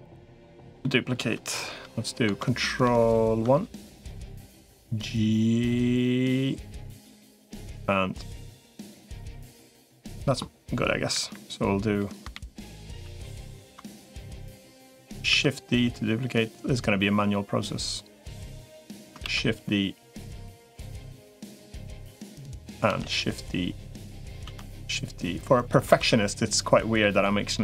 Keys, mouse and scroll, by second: 1.4 KP_3, 2.2 ctrl+KP_3, 2.6 ctrl+KP_1, 4.2 g, 7.5-10.1 middle drag, 11.0 KP_1, 11.8 KP_3, 12.2 ctrl+KP_7, 12.8 ctrl+KP_1, 15.4 shift+d, 19.2 shift+d, 23.0 shift+d, 24.6 shift+d, 26.0 shift+d.